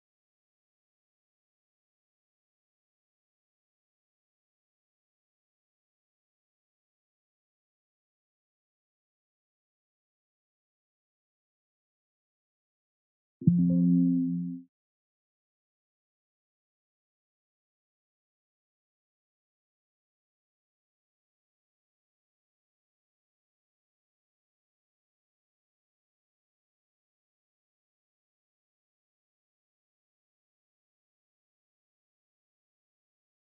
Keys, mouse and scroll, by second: 12.9 click, 17.8 click, 20.2 scroll up 1, 24.7 click, 28.0 click.